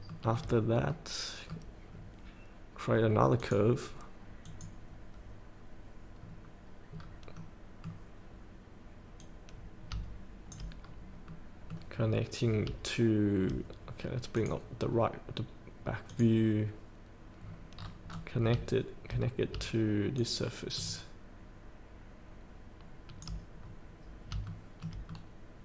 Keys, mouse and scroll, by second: 0.1 shift+middle click, 0.6 scroll up 1, 0.9 middle click, 2.0 scroll down 1, 3.4 click, 6.2 scroll down 1, 6.9 scroll up 1, 7.3-8.8 middle drag, 9.3 click, 10.8 scroll up 1, 11.3 middle click, 12.0 scroll down 1, 14.4 click, 17.4 scroll down 1, 20.2-22.0 shift+drag, 23.0 shift+click, 23.6 scroll up 1, 24.5 shift+middle click, 25.1 middle click.